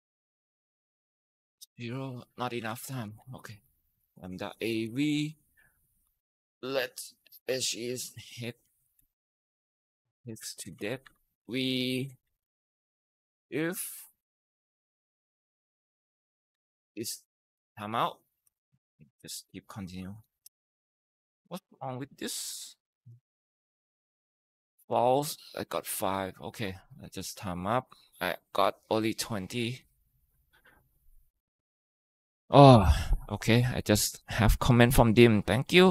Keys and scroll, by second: 1.1-14.0 typing, 2.9 Down, 10.7 Down, 10.8 Tab, 16.3-22.8 typing, 23.2 Return, 23.7 Return, 24.5 Up, 25.1-25.9 typing.